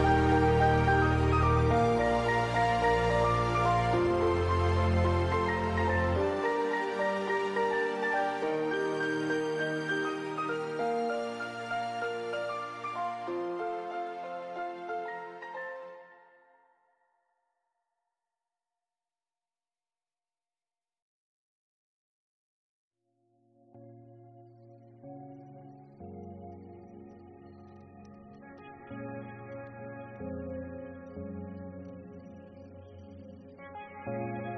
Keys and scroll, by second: 0.0-2.3 typing, 4.0 F5, 8.2 BackSpace, 8.4 Delete, 8.6 ctrl+s, 9.5 ctrl+v, 18.9 ctrl+c, 19.4 ctrl+v, 20.2-21.5 typing, 21.6 ctrl+space, 22.2 ctrl+s, 23.2-25.1 typing, 32.0 ctrl+c.